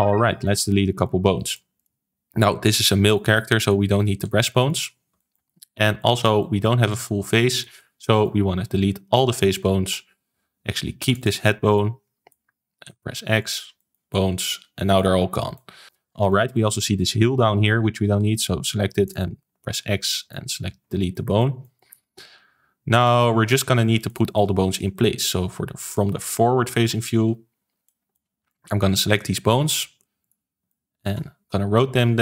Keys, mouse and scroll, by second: 0.2-1.7 shift+middle drag, 1.7 click, 2.5 scroll up 1, 2.8 shift+middle click, 3.5 click, 4.2 x, 5.1-7.3 shift+middle drag, 7.3 scroll up 2, 7.5 middle click, 8.1 click, 11.1 shift+click, 11.7-12.8 middle drag, 12.8 x, 13.7-15.1 shift+middle drag, 15.1-15.5 scroll down 3, 15.5 shift+middle click, 15.8 click, 16.2-17.3 middle drag, 17.3-18.1 scroll up 2, 18.1 scroll up 1, 18.1 x, 19.8-20.2 scroll down 2, 20.2 shift+middle click, 20.8 scroll down 2, 21.0-23.6 middle drag, 23.6 ctrl+s, 24.0-26.8 shift+middle drag, 26.8 KP_1, 27.8 shift+middle click, 28.4 click, 29.5-30.1 scroll up 3, 30.1 shift+click, 30.6-31.6 shift+middle drag, 31.6 r.